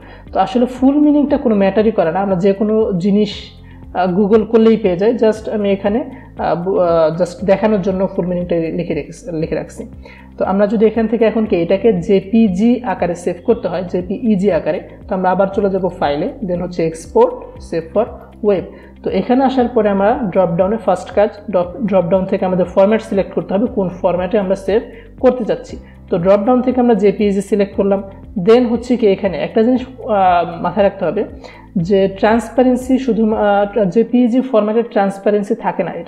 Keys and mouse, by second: 15.9 click, 22.2 click, 27.3 click.